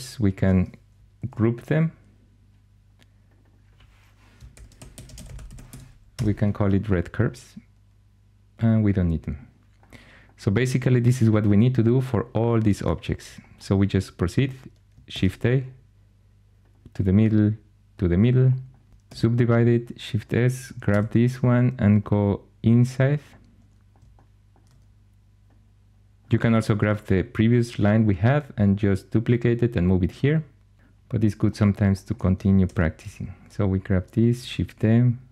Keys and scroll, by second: 1.1 ctrl+g, 4.1-6.1 typing, 15.0 shift+a, 18.9 shift+s, 20.8 g, 32.3-33.0 typing, 34.3 shift+d.